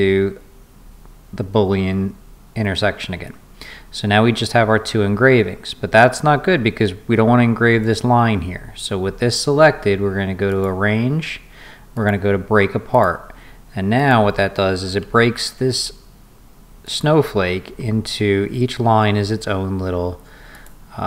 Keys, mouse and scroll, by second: 10.5 click, 11.9 click, 12.9 click, 13.9 click, 16.8 click, 20.5 click.